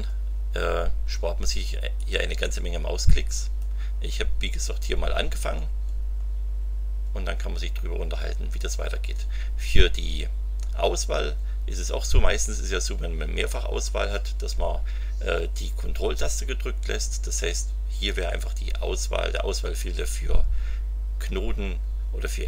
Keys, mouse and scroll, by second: 2.0-3.8 drag, 4.7-5.9 scroll up 6, 6.2-6.8 scroll up 2.